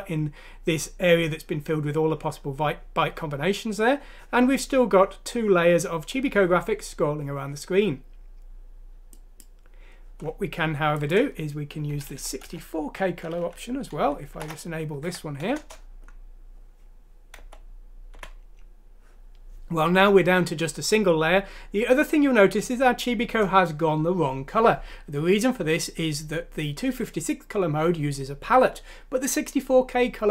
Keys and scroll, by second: 12.5 shift+Home, 13.5 ;, 14.1 Down, 15.2 shift+F6, 15.8 Home, 15.8 F6, 15.8 Return, 15.8 ;, 17.4 End, 18.2 End.